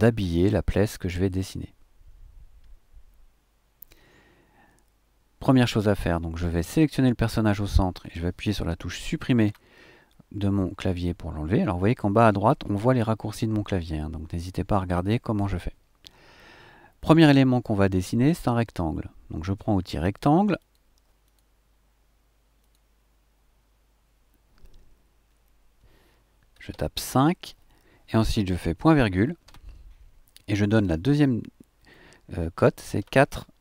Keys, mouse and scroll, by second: 6.6 click, 9.4 Delete, 20.5 click, 21.2 click, 22.6 click, 26.7 KP_5, 29.5 ;, 33.0 KP_4.